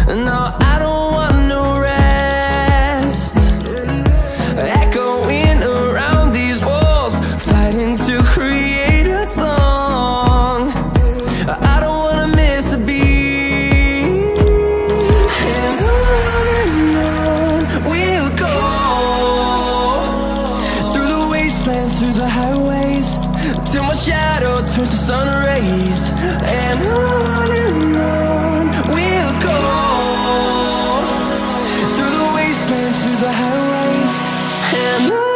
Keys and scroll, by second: 32.0 ctrl+alt+z.